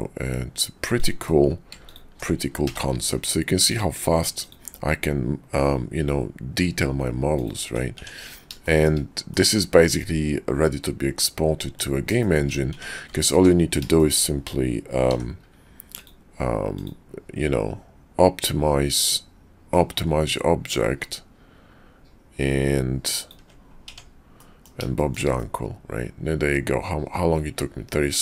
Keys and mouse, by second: 2.7 d, 8.0 Tab, 8.6 shift+drag, 9.3 click, 9.8-11.8 drag, 12.2 shift+click, 13.1 alt+Tab, 13.9 shift+click, 15.0 d, 24.0 Tab, 24.4 drag, 24.9 shift+drag, 25.4-28.2 drag.